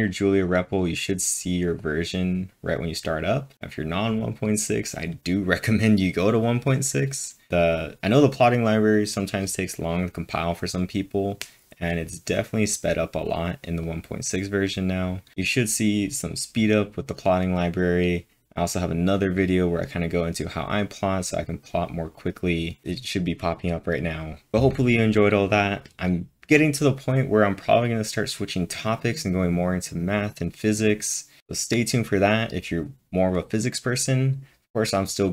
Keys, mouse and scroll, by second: 0.1-1.1 drag, 1.1 click, 2.1 click, 13.6-14.3 typing, 13.8 click.